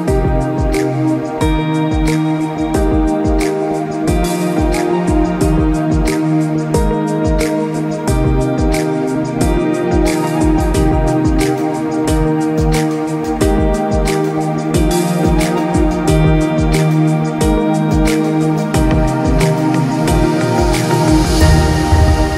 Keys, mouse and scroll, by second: 2.1 shift+click, 20.2 click, 21.7-22.3 scroll down 1.